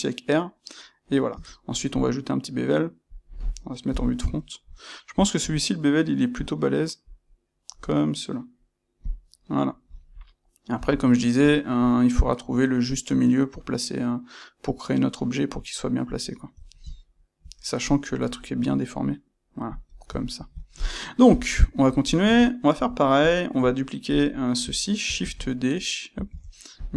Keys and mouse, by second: 9.0 click, 10.7 g, 16.1 click, 16.6-24.0 ctrl+middle drag, 21.2 KP_1, 24.0 click, 24.2-26.8 shift+middle drag, 26.2 shift+d, 26.8 click.